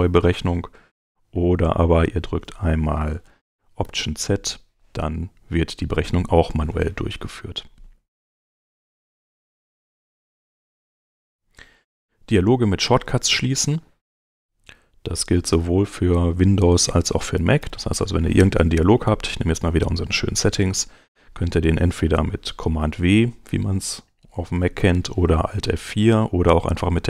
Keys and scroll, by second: 3.8 alt+z, 8.2 super+Tab, 14.7 super+Tab, 17.4 ,, 23.1 super+w, 24.8 shift+,.